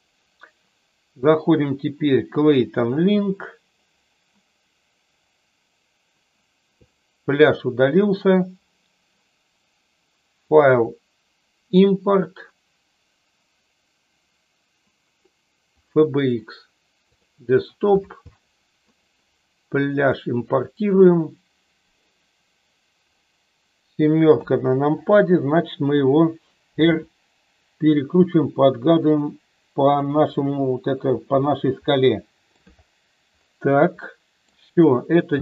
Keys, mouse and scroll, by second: 10.4-16.1 drag, 24.3 KP_7, 26.9 r, 29.8 click, 30.3 middle click, 31.8-32.6 middle drag, 34.0-34.5 middle drag, 35.2 space.